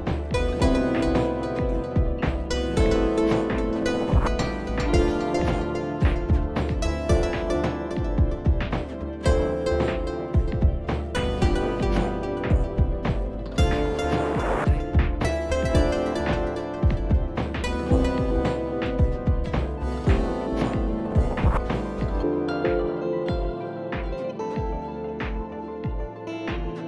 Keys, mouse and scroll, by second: 0.0 click, 2.1 click, 2.2 click, 5.2 click, 6.8 click, 8.6 click, 9.8 click, 10.1 ctrl+d, 11.6 click, 14.2 click, 14.5 click, 14.8 click, 15.0 click, 15.4 click, 15.7 click, 16.0 click, 16.3 click, 16.5 click, 18.3 click, 18.7 click, 19.4 click, 20.2 click, 21.1 click, 22.0 click, 25.1 click, 25.9 ctrl+j.